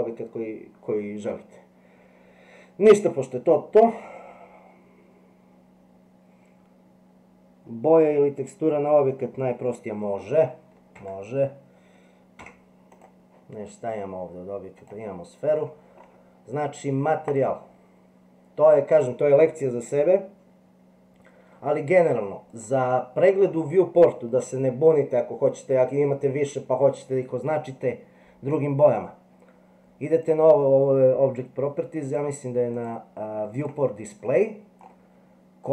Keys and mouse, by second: 10.9 Tab, 12.3 x, 14.8 click, 17.4 click, 22.5 click, 30.2 click, 32.1 click, 32.8 click, 33.6 click.